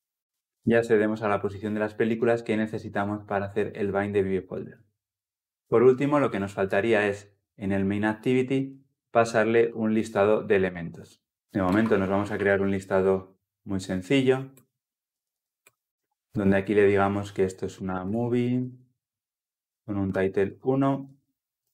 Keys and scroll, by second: 0.4 ctrl+alt+l, 0.6 ctrl+alt+o, 9.3 ctrl+p, 10.8 Escape, 12.6 Escape, 14.4 Return, 19.7 Return.